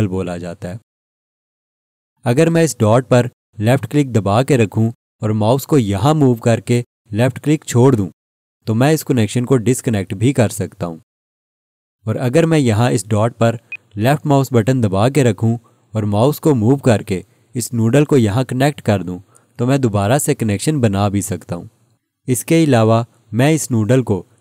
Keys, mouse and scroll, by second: 4.6 click, 13.7 click.